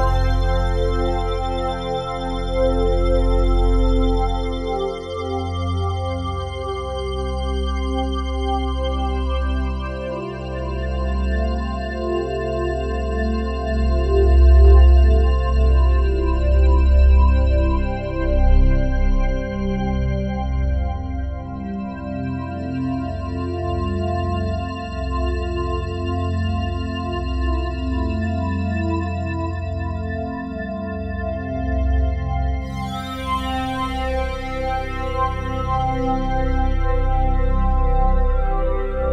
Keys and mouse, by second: 0.0 click, 0.6 click, 2.8-6.9 ctrl+alt+drag, 7.5 click, 8.2-9.8 alt+drag, 10.3-12.3 ctrl+alt+drag, 12.8 click, 13.7 Delete, 14.5-18.6 ctrl+alt+drag, 19.0 click, 19.6-22.8 drag, 23.3 click, 24.6 click, 26.9 click, 27.3 click, 29.1 right click, 29.6 right click, 30.9 click, 32.7 ctrl+s, 33.5 click, 35.4 click, 35.9 click, 37.1 click.